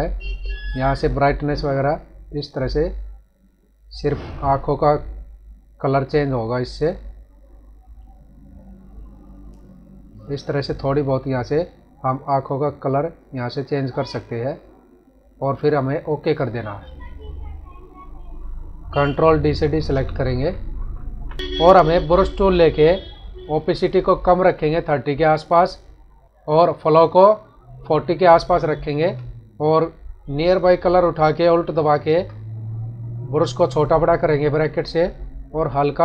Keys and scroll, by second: 19.6 ctrl+d, 20.7 ctrl+-.